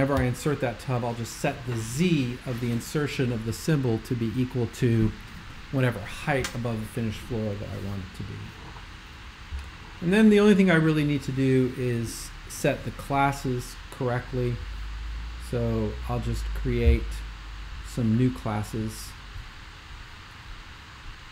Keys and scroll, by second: 0.2 BackSpace.